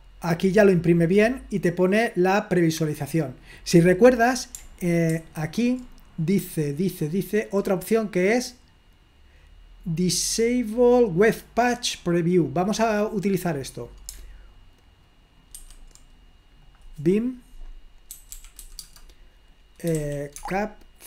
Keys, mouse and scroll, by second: 0.0-1.6 drag, 3.3 click, 5.1 super+3, 6.5-8.3 scroll up 2, 9.1-9.8 scroll up 2, 11.2 click, 12.3 right click, 12.9 click, 15.6 super+1, 16.7 click, 17.9-20.5 typing.